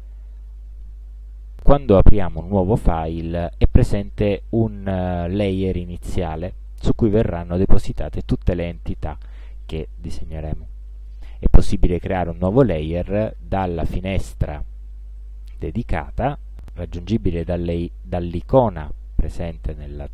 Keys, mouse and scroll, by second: 0.1 click.